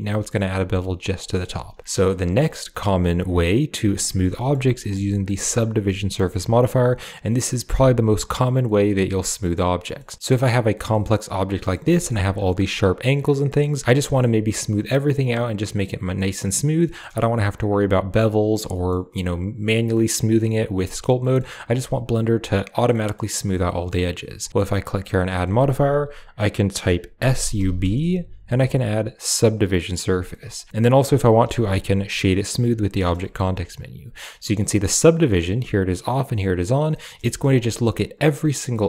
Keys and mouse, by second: 1.0 click, 1.0 right click, 3.3 click, 3.9 drag, 3.9 right drag, 4.2 shift+click, 4.2 shift+right click, 4.6 middle drag, 4.9 shift+middle click, 6.0 shift+middle click, 8.5 middle click, 9.6 middle click, 10.8-11.6 middle drag, 11.7 shift+middle drag, 13.5-13.9 middle drag, 16.0 middle drag, 16.7 middle click, 18.6 middle click, 19.7 middle click, 21.1 middle drag, 22.8 middle drag, 23.5 middle drag, 25.0-29.4 drag, 30.2 click, 30.2 right click, 31.3 w, 32.9 middle drag, 33.1 shift+middle click, 35.2 click, 36.1 click, 36.8 middle drag, 37.1 shift+middle click.